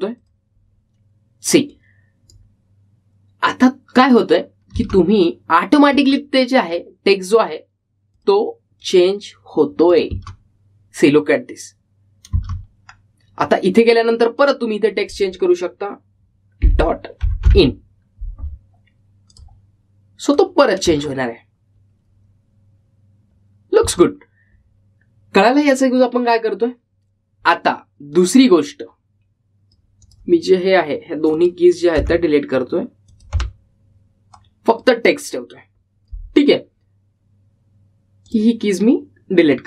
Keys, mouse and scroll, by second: 5.9 space, 7.9-11.2 drag, 11.2 space, 14.0-15.5 scroll down 1, 15.5 click, 18.1-19.0 typing, 20.4 click, 22.0 space, 24.9 space, 29.2-38.2 drag, 37.6-39.6 typing, 39.4 click.